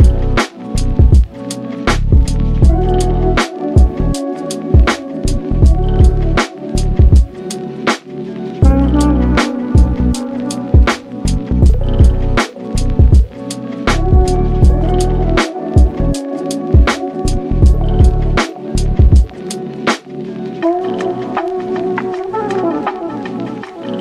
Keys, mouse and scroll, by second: 1.7 ctrl+shift+b, 5.1 Tab, 5.3 click, 5.5-7.4 middle drag, 7.4-7.8 scroll up 2, 7.8 click, 8.1-8.5 shift+middle drag, 8.5-8.8 scroll down 2, 8.8 shift+middle click, 9.5 click, 9.8-11.4 drag, 12.0 KP_7, 12.6 scroll up 1, 12.7 shift+middle click, 13.3-15.3 shift+drag, 15.4-15.9 middle drag, 15.9 scroll down 1, 16.1-16.5 shift+middle drag, 16.5 click, 16.8 shift+click, 17.4-18.4 drag, 18.6-20.0 middle drag, 20.0 click, 20.2-22.3 middle drag, 22.4 click, 22.9 KP_7, 23.3-23.7 scroll up 2, 23.7-24.0 shift+middle drag.